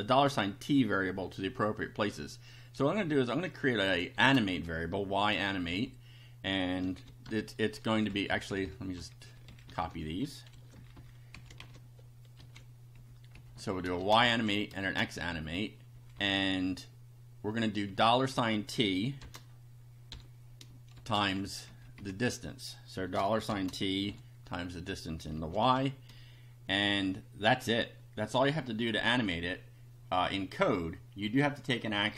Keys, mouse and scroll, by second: 2.8 y, 4.1 shift+a, 5.7 =, 6.8 p, 7.3 BackSpace, 8.3 Up, 8.9 Home, 9.5 shift+Down, 10.5 ctrl+c, 10.8 ctrl+Down, 11.3 ctrl+Up, 11.6 ctrl+shift+End, 12.4 ctrl+v, 12.9 ctrl+Up, 13.5 Right, 14.0 shift+a, 14.3 shift+Down, 14.8 shift+a, 15.2 shift+Up, 15.9 Right, 17.9 Right, 18.3 Left, 19.2 shift+4, 20.0 t, 20.9 shift+8, 21.7 Down, 21.9 Left, 23.5 shift+4, 24.1 t, 25.6 shift+8, 30.2 click.